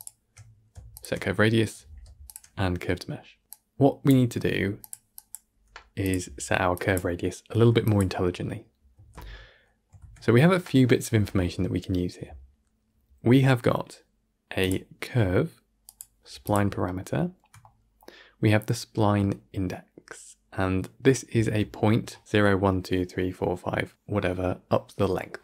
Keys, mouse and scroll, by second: 0.8 alt+shift+click, 2.1 alt+shift+click, 8.8 x.